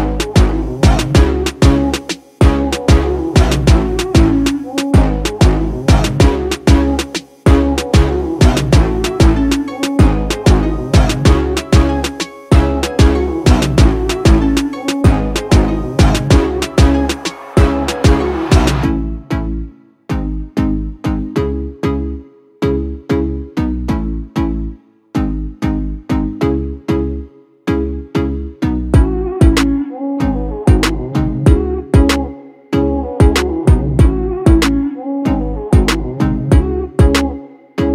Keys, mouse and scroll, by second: 0.4 Return, 3.4-5.8 drag, 9.2-10.6 typing, 11.5 Return, 14.5-16.6 drag, 20.6-21.3 typing, 23.0 Return, 27.8 Return, 28.2 shift+click, 35.3-36.8 typing.